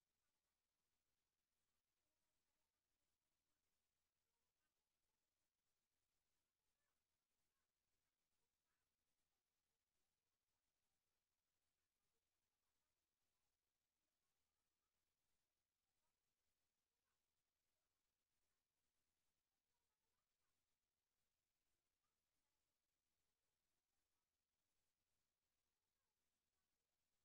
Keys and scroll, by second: 0.2 ctrl+c, 2.9 ctrl+v, 6.0 ctrl+c, 7.9 ctrl+v, 9.9 ctrl+c, 12.3 ctrl+v, 20.4 ctrl+c, 21.8 ctrl+v, 24.3 ctrl+c, 25.7 ctrl+v.